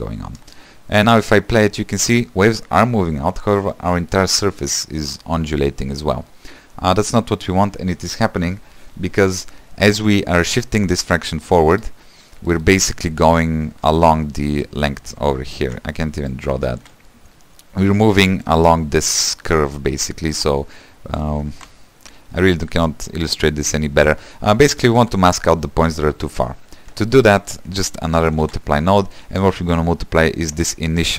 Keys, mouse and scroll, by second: 0.5 space, 3.6 scroll down 3, 3.8-6.4 middle drag, 6.4 space, 6.7-9.4 scroll up 2, 15.8 ctrl+z, 16.0 click, 16.9 ctrl+z, 17.2-21.7 drag, 21.7 ctrl+z, 24.8-28.5 middle drag, 28.5 shift+d.